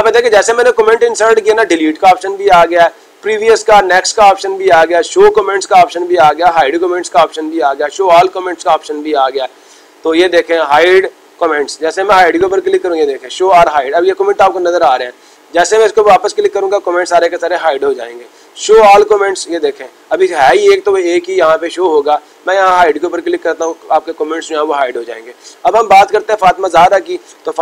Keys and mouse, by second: 11.6 click, 15.9-17.0 drag, 19.3-20.4 drag, 22.4-23.5 drag.